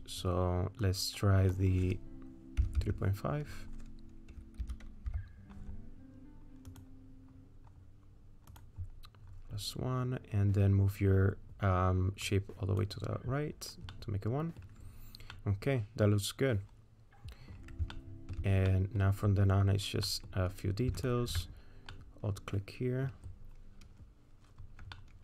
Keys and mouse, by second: 0.0-6.8 drag, 8.5 click, 12.4 click, 14.0 middle click, 15.4-17.1 middle drag, 17.2 middle click, 18.0 shift+middle click, 18.7 middle click, 20.1 middle click, 22.0-23.1 middle drag, 25.0 middle click.